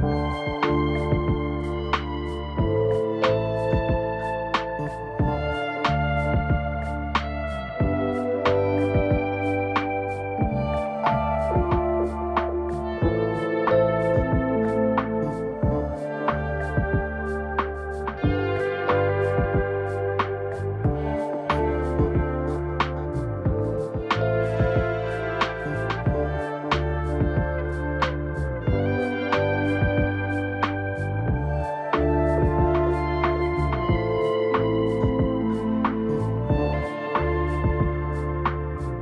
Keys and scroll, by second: 0.6 ctrl+t.